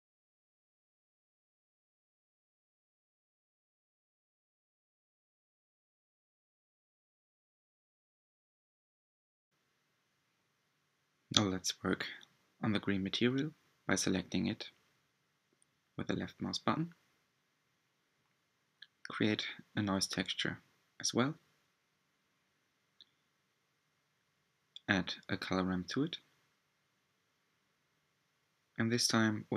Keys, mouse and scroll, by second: 2.5 middle drag, 2.5-3.2 scroll down 5, 2.9-9.7 middle drag, 5.0-5.4 scroll up 2, 6.1-6.8 scroll up 3, 10.4-10.7 scroll down 3, 11.2-11.9 shift+middle drag, 11.9 click, 16.8 click, 17.9 click, 24.1 ctrl+shift+click, 25.7-26.3 scroll up 4, 26.3-28.6 middle drag, 28.6-29.5 scroll up 4.